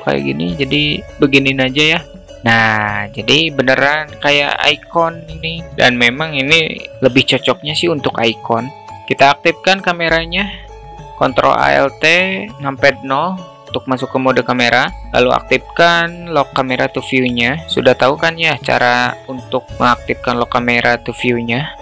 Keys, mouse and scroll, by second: 0.0 alt+middle click, 1.1 alt+middle click, 2.1 middle click, 3.4 middle click, 3.4 alt+click, 3.6 alt+middle click, 14.4 ctrl+alt+q, 16.6 alt+shift+middle click, 18.8 q, 21.7 q.